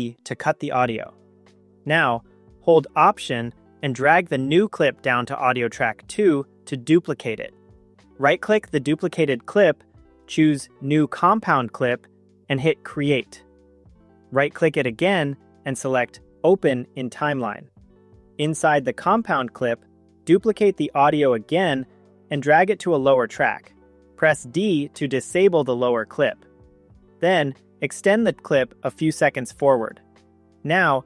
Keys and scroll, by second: 24.4 d.